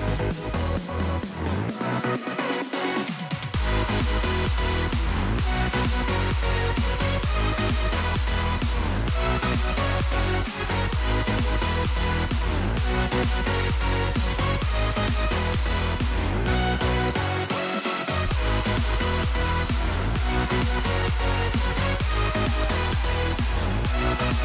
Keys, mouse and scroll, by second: 3.4 scroll down 1, 3.4 middle click, 7.0 right click, 15.0 middle click, 19.2 middle click, 20.6 middle click, 22.3 scroll down 1.